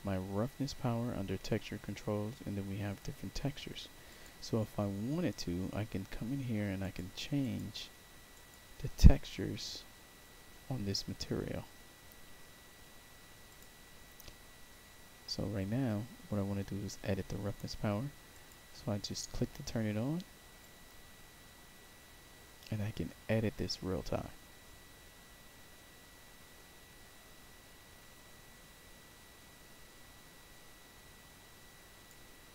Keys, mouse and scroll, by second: 4.0 click, 6.7 click, 7.3 click, 8.2 click, 13.4 click, 18.3 click, 20.5-32.0 drag.